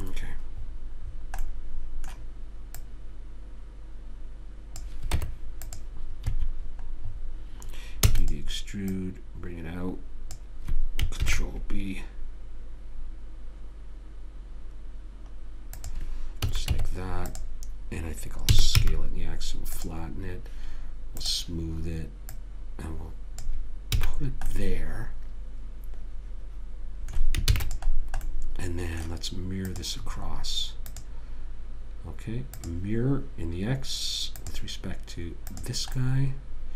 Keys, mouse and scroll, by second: 3.1 click, 5.5 Tab, 6.6 a, 8.4 middle click, 8.4 e, 9.2 click, 11.6 ctrl+b, 16.8 a, 17.0 Tab, 18.8 s, 21.5-24.3 drag, 24.3 a, 25.0-26.6 middle drag, 27.8 ctrl+s, 30.1-32.8 drag, 34.8 click, 36.3-36.7 middle drag, 36.3 right click.